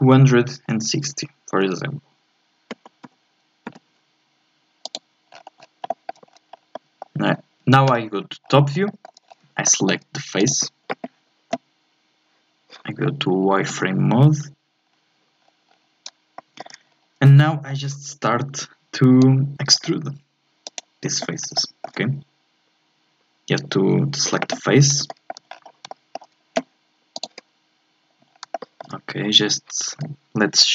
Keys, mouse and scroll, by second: 5.3-5.9 scroll down 7, 5.9 shift+middle click, 6.3 scroll down 3, 6.5 scroll up 4, 6.7-7.9 middle drag, 7.9 KP_7, 8.4 scroll up 4, 8.9 shift+middle click, 9.4-9.7 scroll up 2, 9.7 shift+middle click, 10.5-13.4 drag, 13.7 z, 14.8-15.6 scroll down 3, 15.6-16.4 scroll up 3, 16.4 shift+middle click, 16.8-17.5 scroll up 1, 17.5-19.2 shift+middle drag, 19.2-20.6 drag, 20.6 right click, 21.5-24.6 shift+middle drag, 24.9 shift+scroll down 1, 25.1 shift+middle click, 25.5-25.9 scroll down 2, 25.9-27.1 shift+middle drag, 27.1-28.3 drag, 28.3 scroll up 1, 28.5-30.6 shift+middle drag, 30.6-30.7 drag.